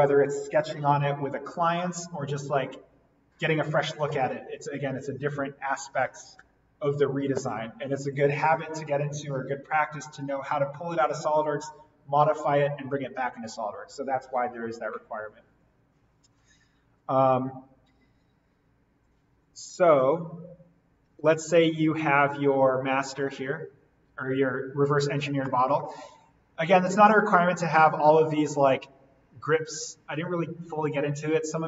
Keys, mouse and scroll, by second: 16.9 right click, 19.0 click, 20.0 ctrl+z, 23.0 click, 25.5 middle click, 25.8-26.1 scroll up 1, 26.1-26.8 scroll down 1, 29.6-30.1 scroll up 1.